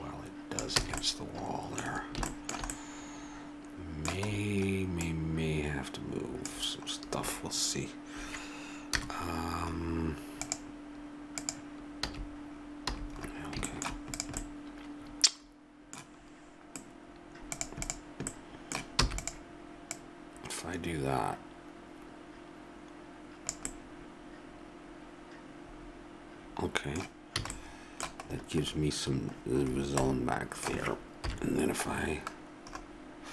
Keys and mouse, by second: 0.8 a, 8.9 KP_0, 12.0 a, 12.8 a, 14.1 click, 17.0 ctrl+Tab, 19.0 e, 25.7-27.5 middle drag, 27.4 a, 31.3 KP_7.